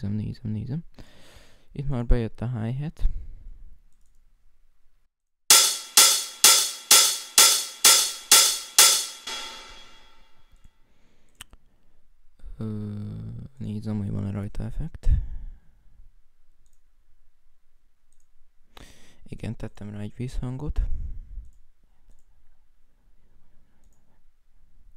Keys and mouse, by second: 0.7 right click, 4.8 right click, 10.1 F5, 10.1 F1, 10.1 right click, 10.3 F1, 10.4 right click, 10.8 F1, 16.1 F1, 16.3 F1, 21.1 right click, 21.3 Escape, 21.5 right click, 21.7 F7, 21.8 F6.